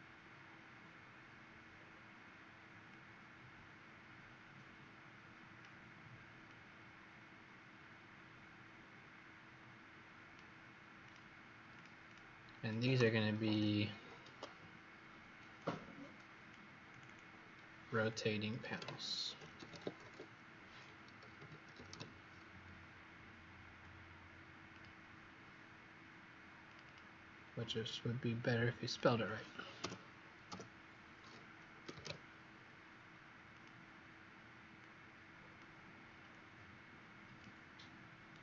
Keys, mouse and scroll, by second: 1.0-1.7 scroll down 1, 1.7 scroll up 2, 2.8 click, 12.0 click, 14.2 Escape, 15.5 click, 17.0 click, 18.0 click, 18.9-22.3 typing, 24.6 click, 26.7 click, 27.5 click, 29.7-32.4 typing, 33.4 click, 38.2 right click.